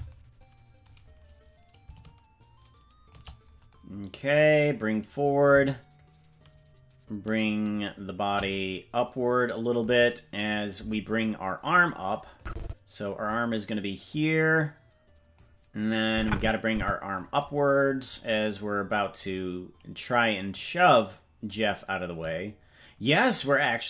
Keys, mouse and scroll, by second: 1.9-3.1 shift+drag, 5.4-8.3 drag, 10.5 right click, 12.3 click, 14.0-15.4 drag, 16.1-17.2 drag, 18.6-20.4 scroll down 3, 19.1-20.4 scroll up 1, 20.5-21.5 drag, 20.5-21.5 scroll up 1, 23.0-23.8 shift+drag.